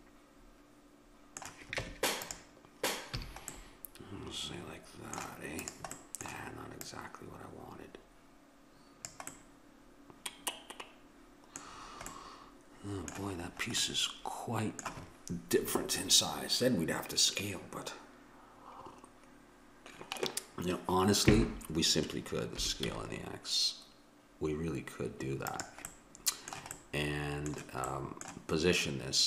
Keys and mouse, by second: 1.9 Tab, 3.2 a, 5.6-8.6 drag, 9.4-11.1 middle drag, 11.7-19.6 middle drag, 22.6 s, 25.9 middle click.